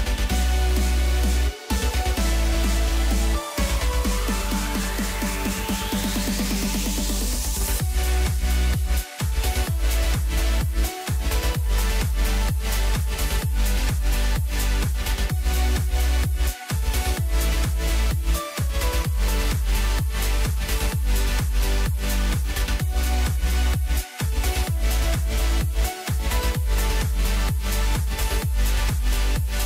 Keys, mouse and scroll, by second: 0.9 click, 1.8-3.2 drag, 11.4 scroll down 2, 11.6-13.1 middle drag, 13.1 click, 14.0 shift+click, 14.9 ctrl+l, 16.7-17.6 middle drag, 17.6-18.9 scroll up 3, 18.9 click, 19.4 scroll down 2, 19.7-21.5 middle drag, 21.5-22.7 drag, 28.2 click, 28.5-29.6 middle drag.